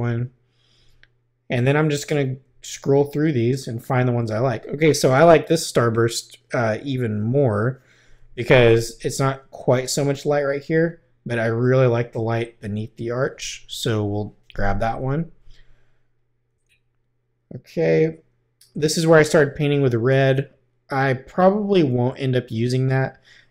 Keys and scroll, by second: 2.4 Right, 13.8 |, 16.5 Right.